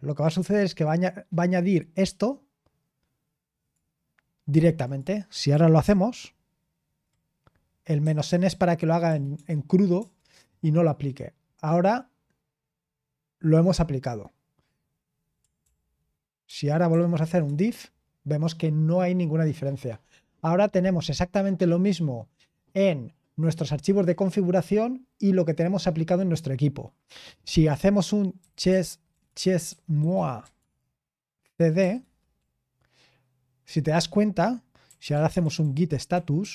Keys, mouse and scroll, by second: 0.8-5.8 drag, 5.8 ctrl+p, 8.0 Left, 8.2 Left, 8.4 Left, 9.0 BackSpace, 9.3 BackSpace, 10.8 Return, 15.6 ctrl+p, 16.4 ctrl+p, 16.9 ctrl+p, 28.1-32.3 typing, 34.6-36.5 typing.